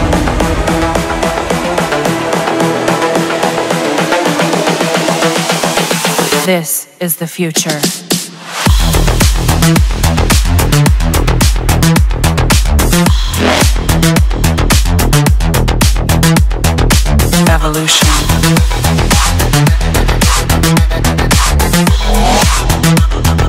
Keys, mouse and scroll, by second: 0.0-0.6 typing, 2.1 typing, 3.0 Return, 11.7 Escape, 12.3 Escape, 15.2 click, 16.0 click, 18.2 click, 19.2 click, 21.6-22.7 drag, 22.9-23.4 drag.